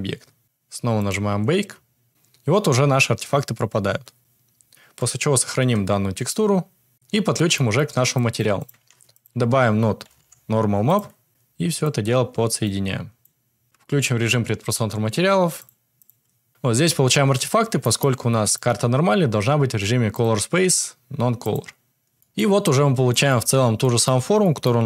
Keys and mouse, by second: 1.0 click, 5.6 alt+s, 8.5 click, 8.7 shift+a, 11.3 click, 12.6 click, 14.0 click, 15.5 click, 15.9 click, 18.4 click, 20.3-21.6 drag, 22.6-23.0 middle drag, 23.2 shift+middle drag, 23.7 middle drag, 24.3 middle click.